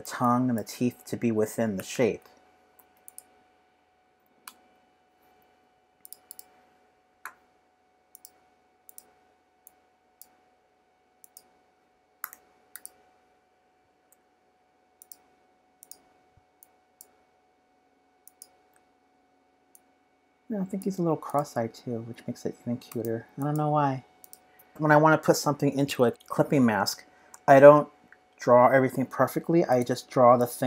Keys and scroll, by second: 22.9 v, 24.7 p, 28.1 p.